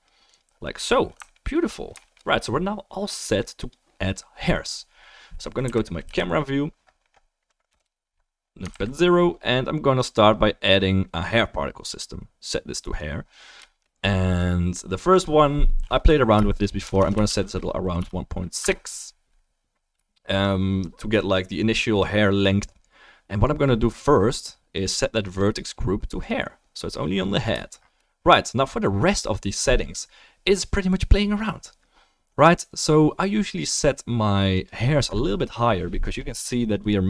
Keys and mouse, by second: 1.3 alt+middle click, 1.5 alt+middle click, 5.6 Right, 6.0 Down, 7.7 KP_0, 8.7 ctrl+s, 10.1-11.8 drag, 12.9-14.9 drag, 15.1 click, 17.0 BackSpace, 36.9-37.0 drag.